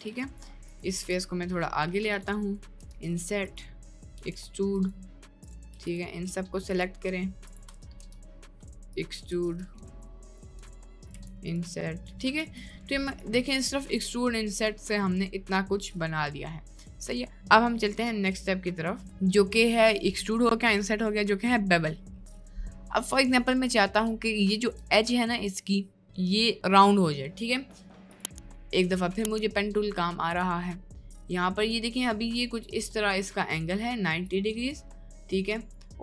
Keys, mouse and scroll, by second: 0.0 Tab, 1.0 g, 2.5 middle click, 2.9 i, 3.9 middle click, 4.2 e, 5.8 shift+click, 8.0 i, 9.3 r, 9.8 e, 10.3 click, 10.7 i, 11.3 e, 12.5 Tab, 12.6 middle click, 13.5 middle click, 14.3-14.8 middle drag, 15.2 middle click, 16.1-17.3 middle drag, 17.9 middle click, 18.6 shift+middle click, 19.1 Tab, 22.5 middle click, 22.9 middle click, 23.5 click, 24.7 Tab, 28.0 middle click, 28.8 Tab, 31.6-32.8 drag, 34.2 click.